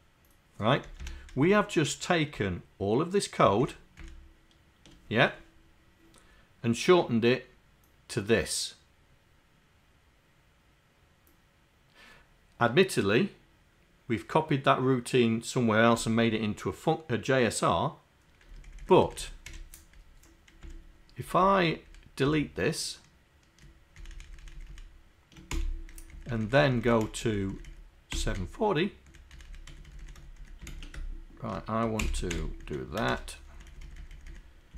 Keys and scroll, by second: 32.0 ctrl+Insert, 32.3 Delete, 32.7 Down, 33.1 shift+Insert, 33.5 Down, 34.2 Down.